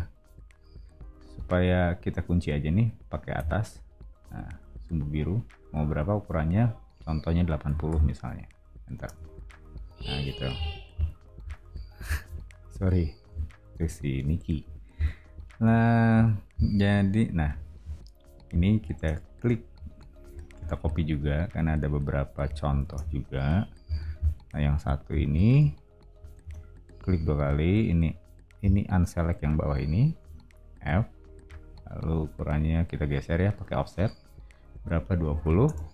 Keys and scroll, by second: 3.3 Up, 7.4-8.4 typing, 9.0 Return, 10.5 o, 19.4 space, 20.2 m, 22.8 space, 23.8 o, 26.4 space, 30.7 f, 35.0-35.9 typing.